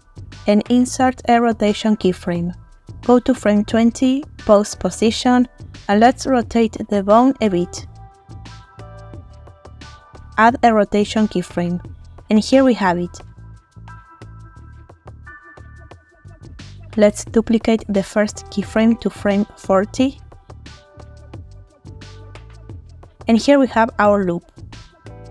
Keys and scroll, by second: 6.8 r, 17.6 shift+d, 23.8 space.